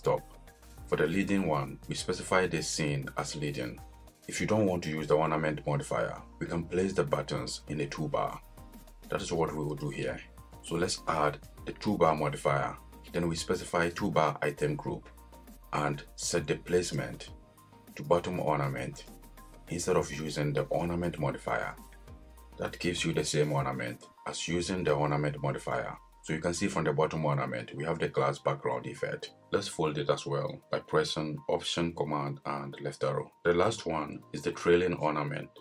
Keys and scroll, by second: 32.6 alt+super+Left.